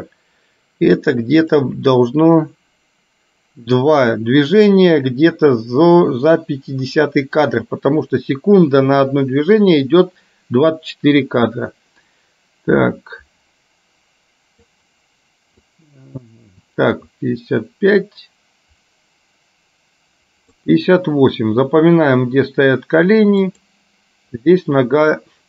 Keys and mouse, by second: 1.8 click, 12.3-14.9 drag, 15.9-20.8 drag, 23.6 click.